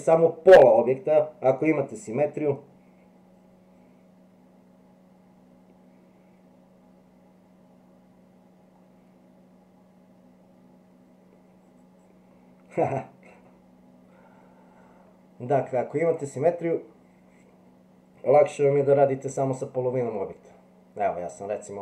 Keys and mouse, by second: 16.0 click, 19.3 e.